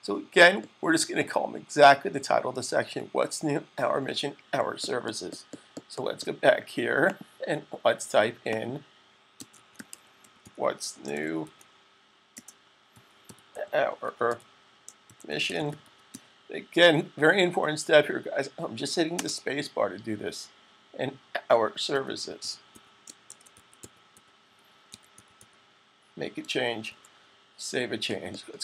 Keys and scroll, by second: 9.3-16.5 typing, 21.5-25.7 typing, 26.8 super+s.